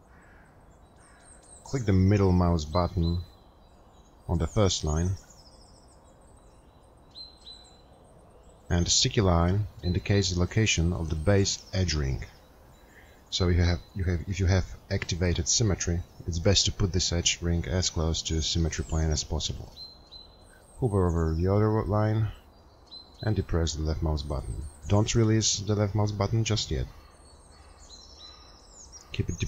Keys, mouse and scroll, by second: 10.0 middle click.